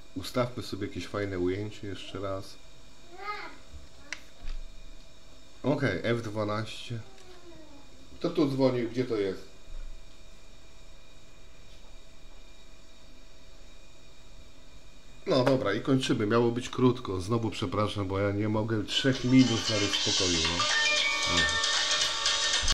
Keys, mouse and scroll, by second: 0.1-3.7 middle drag, 4.4 ctrl+alt+KP_0.